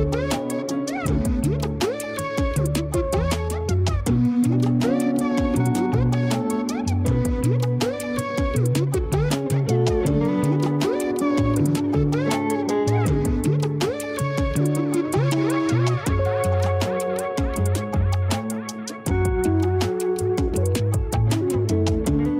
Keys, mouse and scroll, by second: 0.0 alt+shift+middle click, 0.7-1.3 scroll down 5, 1.3 shift+middle click, 1.8 Tab, 2.3-2.8 middle drag, 2.8-3.4 scroll up 6, 3.4-6.5 middle drag, 6.8-7.5 scroll down 10, 7.5 Tab, 7.7-8.3 scroll up 1, 8.3 KP_1, 8.9 scroll up 1, 9.3 r, 12.7 g, 13.5 r, 16.9 g, 18.1 scroll up 1, 18.3 r, 19.9 g, 20.9 scroll up 1, 21.1-21.7 scroll down 2, 21.7 KP_3.